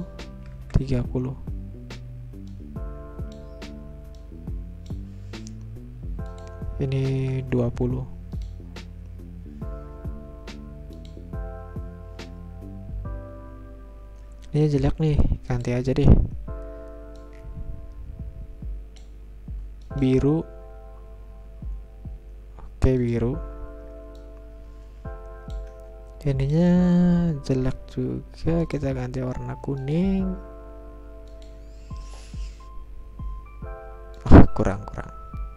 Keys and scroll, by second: 2.1 Return, 6.7-7.6 typing, 10.1 Return.